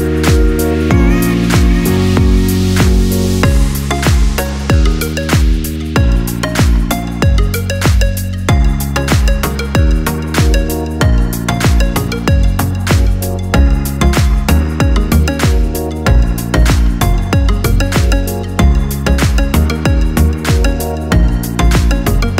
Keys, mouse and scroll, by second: 0.7 scroll down 1, 0.7-4.4 middle drag, 4.4 right click, 7.9 right click, 8.5 right click, 9.3 shift+right click, 10.7 ctrl+p, 17.9-18.5 scroll up 1, 18.5 shift+middle click, 19.1 right click, 19.7 right click, 21.7 right click, 22.2 r.